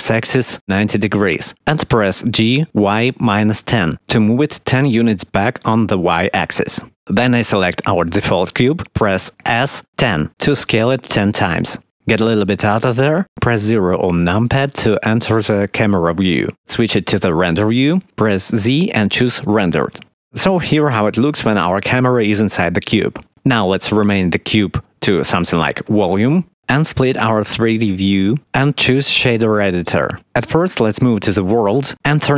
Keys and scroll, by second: 1.8-3.7 typing, 4.8 Return, 8.8 s, 9.8 1, 10.1 0, 11.0 Return, 14.1 0, 17.3 z, 24.7-25.7 typing, 26.0 Return.